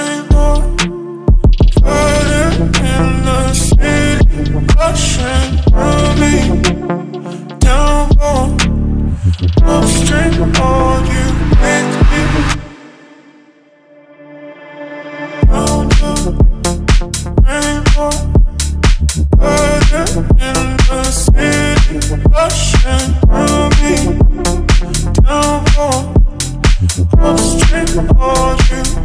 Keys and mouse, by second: 3.3-4.0 drag, 4.5-4.8 ctrl+drag, 9.5 shift+a, 16.0 middle click, 16.7-17.1 middle drag, 19.1 Tab, 19.5 3, 23.2 shift+s, 25.8 Tab, 26.4-29.0 drag.